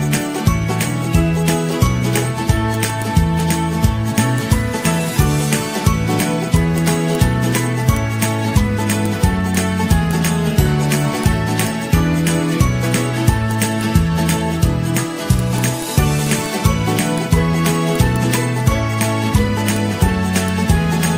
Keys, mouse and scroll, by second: 0.1 ctrl+shift+z, 0.3 ctrl+shift+z, 1.3 ctrl+shift+z, 1.8 ctrl+z, 3.7 Delete, 4.3 Delete, 4.7 Delete, 5.6 ctrl+-, 5.7 ctrl+-, 6.2 ctrl+-, 6.7 ctrl+-, 6.9 ctrl+-, 10.5 ctrl+g, 10.6 ctrl+-, 10.8 ctrl+-, 18.4 ctrl+shift+[, 18.9 ctrl+], 19.0 ctrl+], 19.1 ctrl+], 19.2 ctrl+], 20.7 z.